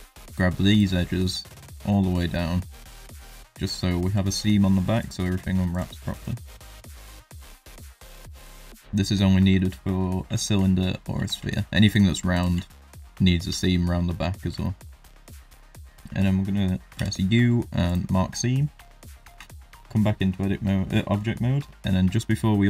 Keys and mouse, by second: 0.2 shift+click, 1.0 middle click, 2.1 shift+middle click, 2.7 shift+click, 3.4 shift+middle click, 3.9 ctrl+middle click, 6.1 shift+click, 6.5 shift+click, 7.0 middle click, 8.2 shift+click, 8.7 shift+click, 9.0 shift+middle click, 9.3 middle click, 9.8 shift+middle click, 11.0 ctrl+middle click, 11.9 shift+click, 12.8 middle click, 13.6 shift+middle click, 14.1 middle click, 14.6 shift+middle click, 14.9 middle click, 15.8 middle click, 16.9 u, 18.3 middle click, 19.3 Tab, 19.7 middle click.